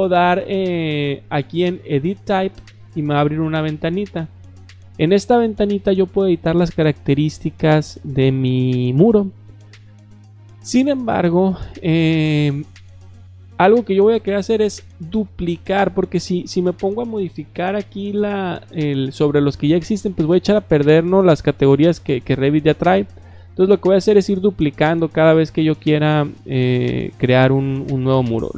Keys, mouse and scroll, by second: 0.0 click, 0.7 click, 2.6 click, 4.3-4.6 drag, 21.5-22.4 drag, 27.7-28.0 drag.